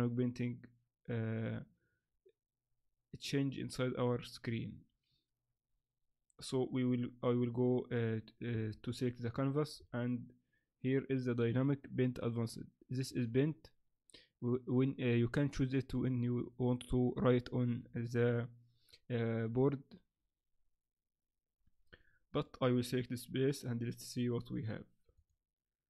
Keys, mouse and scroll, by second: 8.5 Escape, 8.9 right click, 9.8-10.2 scroll down 7, 13.1 click, 22.3 click, 24.5 click, 25.1 click.